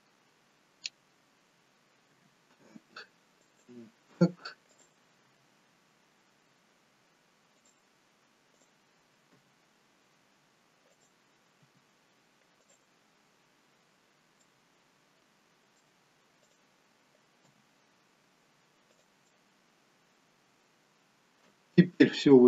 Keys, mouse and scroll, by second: 2.3 r, 4.8 click, 5.4 r, 8.6 click, 9.3 g, 11.8 r, 14.5 middle click, 16.4 click, 17.5 g, 19.3 middle click.